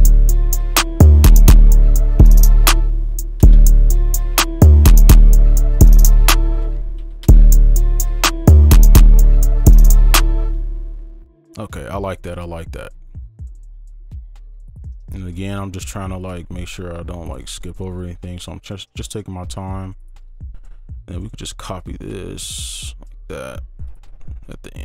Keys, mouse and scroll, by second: 0.1 ctrl+click, 1.1 right click, 2.8 space, 3.4 space, 4.7 space, 4.9 ctrl+click, 5.3-6.0 alt+scroll up 5, 6.6-7.0 alt+scroll up 1, 6.6 space, 7.0 alt+scroll down 1, 7.2 space, 7.9 right click, 10.8 space, 12.1 ctrl+2, 12.8 ctrl+click, 13.5-14.2 alt+scroll up 1, 14.3 ctrl+click, 14.7-15.2 alt+scroll up 1, 15.2 ctrl+click, 16.5-17.1 alt+scroll up 1, 17.1 ctrl+click, 17.5-18.2 alt+scroll down 2, 18.2 ctrl+click, 19.1 shift+click, 20.3 shift+right click, 21.1 ctrl+click, 22.1 shift+click, 24.1 shift+2, 24.4 shift+click.